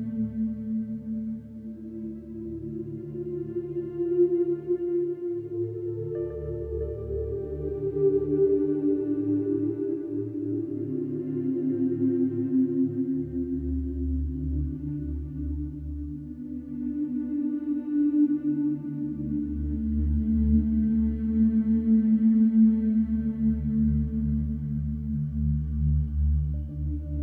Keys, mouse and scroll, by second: 0.2 ctrl+r, 1.9 middle click, 2.2-3.1 scroll up 4, 2.6 shift+middle click, 3.1 shift+middle click, 3.9 g, 5.9 click, 6.7 alt+click, 8.3 alt+e, 11.1-12.1 middle drag, 12.1 Tab, 12.5 scroll down 2, 12.8-13.8 middle drag, 13.8 click, 14.2-15.7 middle drag, 15.7-16.1 scroll up 1, 16.1 click, 17.6 click, 20.0-21.3 drag, 21.8 click, 24.1-25.1 drag, 25.7 g.